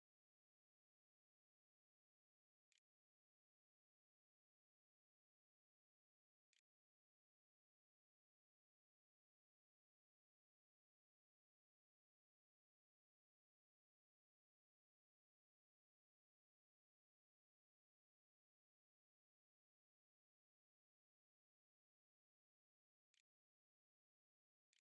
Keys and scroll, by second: 2.1 Home, 2.5 End, 3.0 Delete, 3.2 \, 3.3 Return, 6.3 Return, 6.8-7.6 typing, 21.4-24.8 typing.